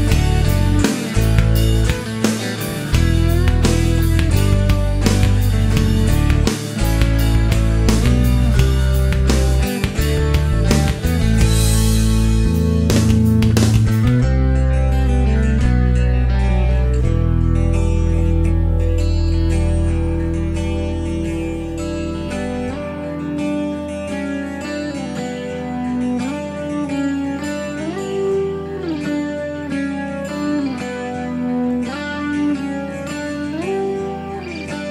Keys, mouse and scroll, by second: 0.3 click, 1.6 click, 3.2 click, 4.5 click, 6.4 click, 7.4 e, 8.8-9.2 scroll up 1, 9.3 middle click, 9.6-10.0 scroll up 1, 11.0 click, 11.6 click, 12.5 click, 13.2 click, 14.6 shift+o, 15.2-16.0 shift+middle drag, 17.1 click, 18.4 click, 19.2 shift+o, 20.1-20.7 shift+middle drag, 20.9 middle click, 21.0 scroll up 1, 22.1 click, 22.8 click, 23.4 shift+o, 23.8 shift+middle click, 23.9 shift+click, 25.9 click, 26.5 click, 26.9 shift+o, 27.4 shift+middle click, 29.5 click, 30.4 click, 31.2 click, 32.1 click, 32.5 shift+o, 32.9-33.6 shift+middle drag.